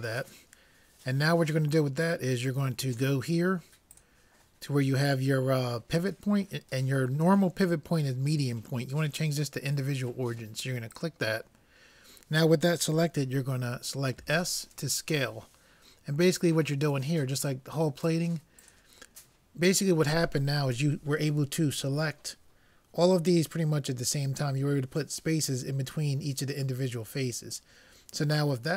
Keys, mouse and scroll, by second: 4.0-5.8 drag, 14.3 s.